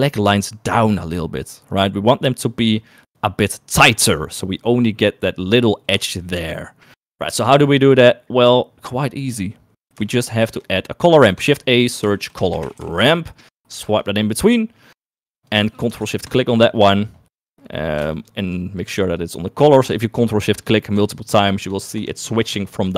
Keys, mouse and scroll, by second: 6.1 shift+middle click, 7.3 middle click, 7.7 middle click, 10.5 shift+a, 14.6 middle click, 15.8 click, 16.6 ctrl+shift+click, 19.0 ctrl+shift+click, 19.5 click, 21.2 ctrl+shift+click, 21.6 ctrl+shift+click, 22.0 ctrl+shift+click, 22.5 ctrl+shift+click, 22.8 ctrl+shift+click.